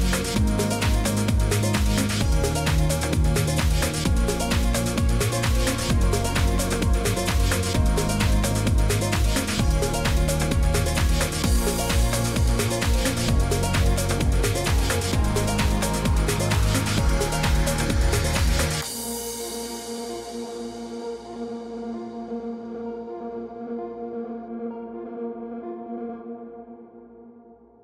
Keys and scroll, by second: 2.0 z, 5.7 shift+Up, 6.8 Up, 6.9 Up, 7.2-7.8 Up, 8.1 Up, 12.7-13.4 typing.